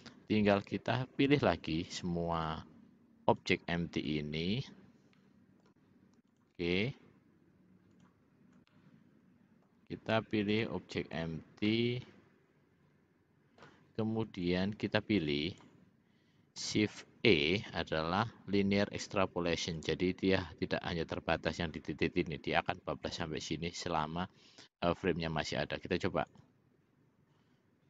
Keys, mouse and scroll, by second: 0.6 click, 2.5 shift+click, 3.4 shift+click, 5.3 middle click, 6.4 shift+click, 8.1 shift+click, 8.9 middle click, 11.8-13.8 middle drag, 14.5-15.9 drag, 17.2 shift+e, 26.4 click.